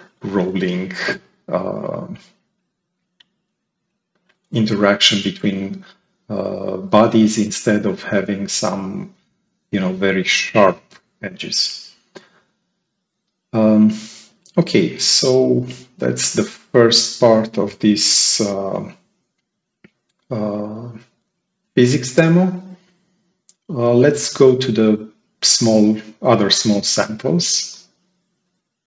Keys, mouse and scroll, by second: 9.7 right click, 11.4 click, 14.6-15.3 right drag, 14.7-15.3 drag, 15.7-16.0 scroll up 2.